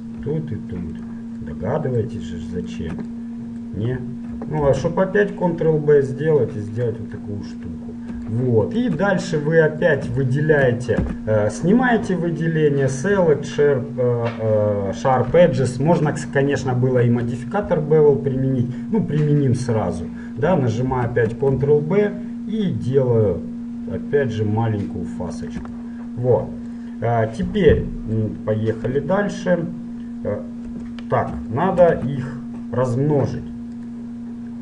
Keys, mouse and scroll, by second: 1.2-2.8 right drag, 2.8-3.8 middle drag, 3.8 right click, 4.6-6.8 middle drag, 4.9 ctrl+b, 9.5 middle click, 9.7 middle click, 11.1 a, 15.8 middle click, 16.0-21.2 middle drag, 21.2 ctrl+b, 26.0-28.7 middle drag, 29.0 KP_7, 30.8 KP_1, 32.1 z, 33.5 middle click, 34.0-34.6 drag.